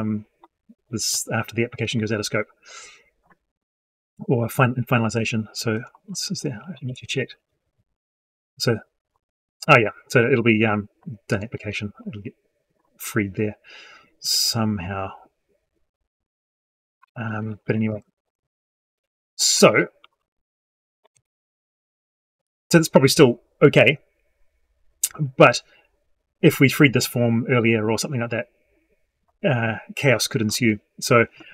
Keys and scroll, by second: 6.7 ctrl+End, 17.7 alt+Left, 21.0 alt+Left.